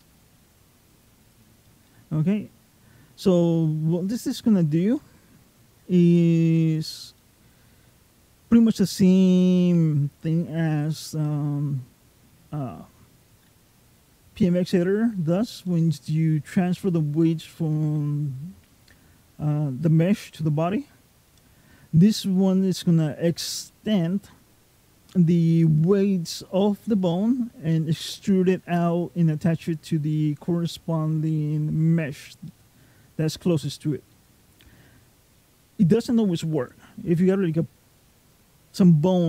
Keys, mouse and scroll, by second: 1.1 click, 1.7 middle click, 3.3 scroll up 2, 4.0 shift+middle click, 4.8 middle click, 7.0 middle click, 15.5 middle click, 21.1 middle click, 23.5 middle click, 27.5 middle click, 29.9 middle click, 32.3 middle click, 33.9 middle click.